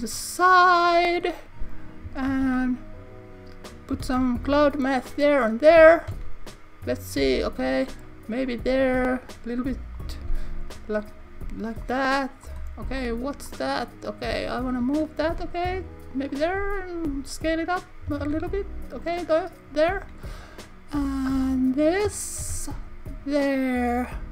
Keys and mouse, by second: 1.0 click, 2.3 shift+d, 3.7 click, 4.0 shift+d, 4.9 click, 6.1 KP_1, 7.7 g, 8.5 click, 8.8 s, 9.9 click, 10.3 shift+g, 10.9 click, 11.8 click, 13.4 click, 16.3 click, 16.6 s, 17.0 click, 18.2 shift+d, 19.0 click, 21.0 click, 21.4 click, 22.4 shift+d, 23.4 click.